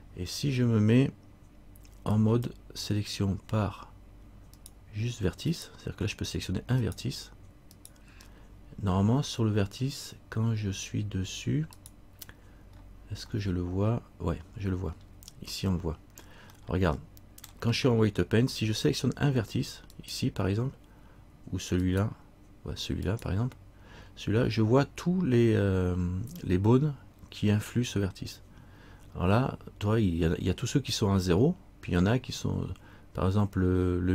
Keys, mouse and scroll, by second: 2.3 click, 4.7 right click, 5.8 right click, 11.9 right click, 12.9-13.4 scroll up 1, 15.3-16.6 scroll up 14, 16.8 middle click, 20.1 right click.